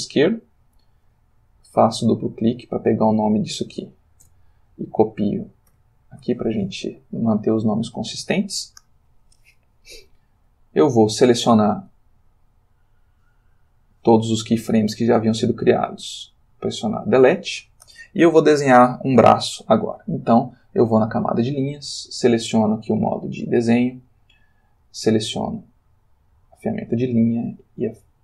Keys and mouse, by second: 1.7 click, 2.5 click, 3.6 ctrl+c, 4.2 ctrl+Return, 5.7 ctrl+v, 13.5 click, 14.6 a, 15.5 x, 16.7 click, 21.0 click, 22.7 click, 23.5 click, 24.8 click, 25.8 click, 26.9 click.